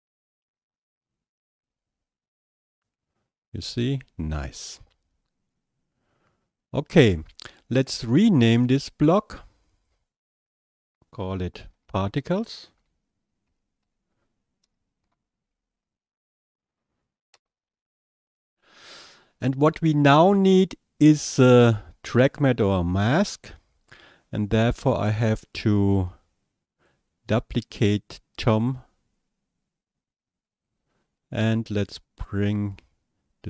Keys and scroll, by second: 12.0-16.5 typing, 17.3 Return.